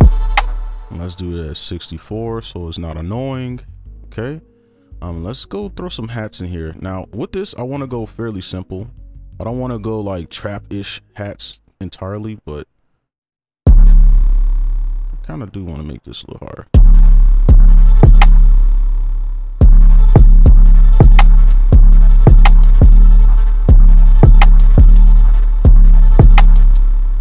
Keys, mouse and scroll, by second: 0.6 space, 4.9 right click, 6.8-9.1 scroll up 1, 9.1 double click, 13.6 space, 13.8 space, 14.1 right click, 17.1 space, 17.4 space, 18.3 space, 19.6 space, 19.7 right click, 20.4 space, 21.4 space, 21.7 space, 22.1 right click, 23.6 space, 25.4 space, 25.6 space, 26.6 space.